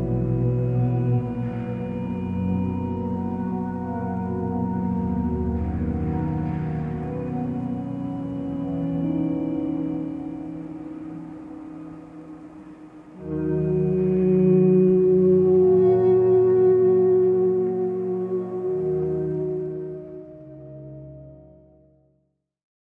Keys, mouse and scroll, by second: 6.8 ctrl+space.